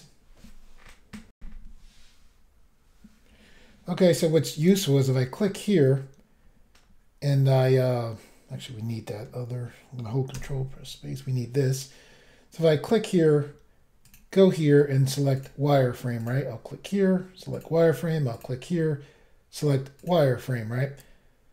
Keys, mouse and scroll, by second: 1.3 Pause, 1.4 Insert, 4.6 click, 4.7 click, 10.3 ctrl+space, 14.0 click, 14.1 click, 15.4 click, 16.3 click, 17.5 click, 17.6 click, 18.3 click, 18.4 click, 20.0 click, 20.1 click, 21.2-21.5 scroll up 1.